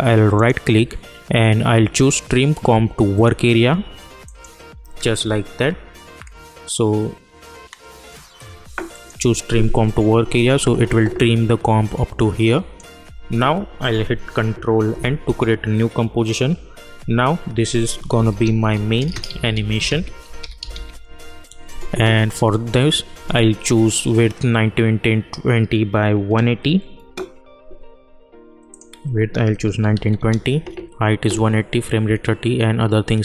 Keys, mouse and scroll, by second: 0.4 right click, 8.9-14.8 drag, 14.8 ctrl+n, 17.8-21.2 typing, 28.7 click.